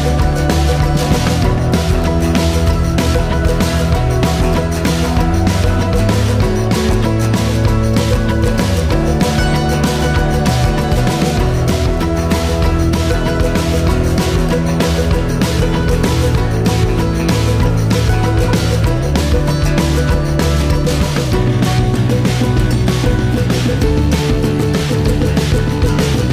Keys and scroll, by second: 0.8 ctrl+l, 7.8 a, 22.5 2, 23.2 Return.